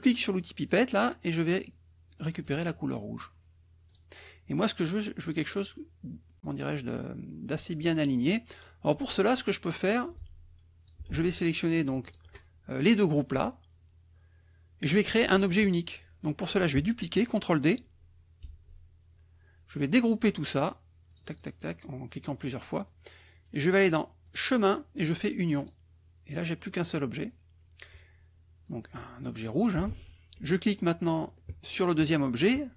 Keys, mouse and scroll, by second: 0.6 click, 2.4 click, 3.8 click, 8.6 middle click, 9.4 click, 10.1-11.0 drag, 11.2 ctrl+z, 12.0 shift+click, 15.5 KP_Subtract, 18.4 ctrl+d, 21.0 click, 24.2 click, 25.5 click, 28.6-29.8 drag, 29.8 ctrl+z.